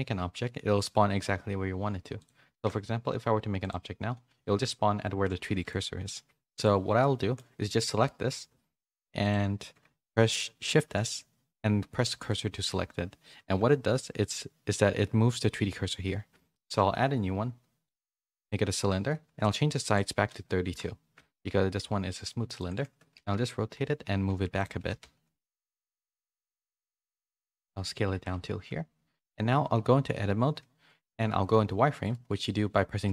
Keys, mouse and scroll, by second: 2.2 click, 2.5 shift+a, 5.3 x, 7.1 shift+middle click, 10.7 shift+s, 13.5 KP_3, 16.5 shift+a, 19.4-20.8 drag, 23.1 s, 24.7 g, 28.1 Tab, 28.3 1, 33.0 z.